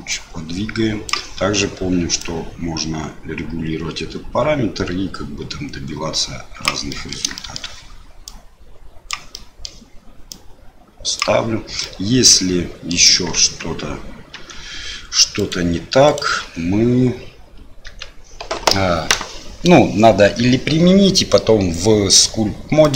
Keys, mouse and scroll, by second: 0.1-1.1 drag, 2.2-6.6 drag, 7.0 middle click, 7.4 shift+middle click, 8.4 click, 9.5 middle click, 10.5 click, 11.9-12.9 middle drag, 13.4 Tab, 14.4 Tab, 15.4 click, 16.1 click, 16.5 Tab, 17.9 Tab.